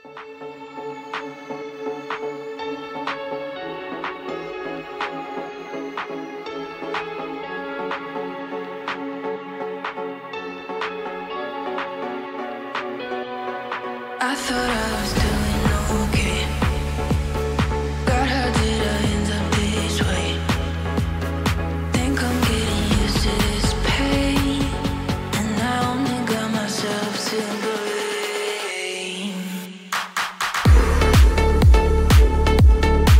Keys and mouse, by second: 3.0 shift+click, 3.8 shift+click, 6.0-8.0 middle drag, 8.7 e, 10.8 click, 11.1 middle click, 12.7 s, 12.8 x, 15.3 click, 16.2-19.8 middle drag, 21.2 shift+middle click, 22.4 middle click, 24.5 2, 24.8-26.0 middle drag, 27.4 ctrl+click, 28.8 shift+click, 29.4-30.4 middle drag, 31.8 ctrl+click, 32.4 middle click.